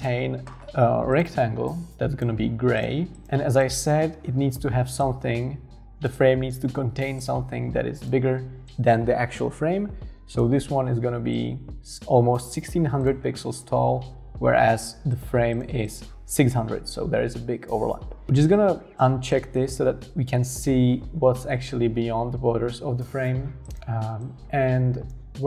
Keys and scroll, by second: 3.3 super+x, 3.9 super+v.